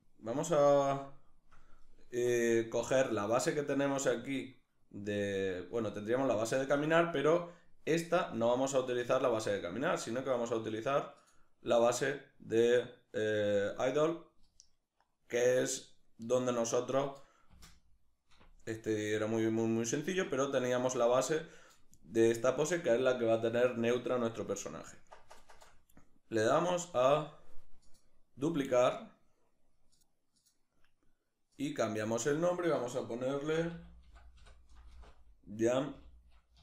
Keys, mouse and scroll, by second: 1.0-6.7 shift+middle drag, 6.7-12.9 drag, 15.6-27.8 middle drag, 17.5 space, 22.5 scroll down 1, 22.7-23.2 scroll up 1, 27.8-36.6 drag.